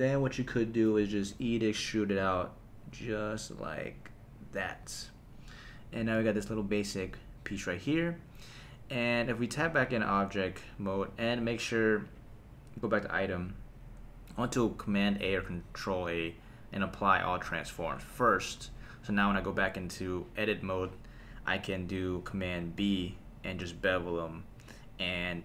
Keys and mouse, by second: 1.3 e, 4.6 click, 9.6 Tab, 11.1 n, 12.2-13.0 drag, 15.2 super+a, 18.5 n, 19.1 Tab, 22.8 super+b.